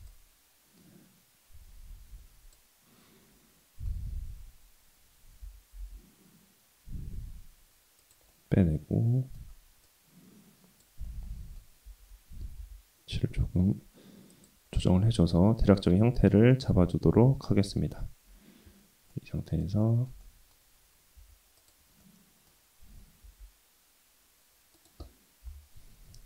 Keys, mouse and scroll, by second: 0.9-3.8 middle drag, 5.5 e, 8.3-9.4 middle drag, 9.9 click, 11.0 middle click, 11.8 g, 14.7-15.9 middle drag, 16.1 Tab, 16.5-17.5 middle drag, 17.7 Tab, 17.8-19.1 scroll up 2, 19.1 middle click, 19.8 shift+middle click, 20.2 middle click, 21.2 2, 21.6 click, 22.0 middle click, 23.2 g, 25.4 KP_7.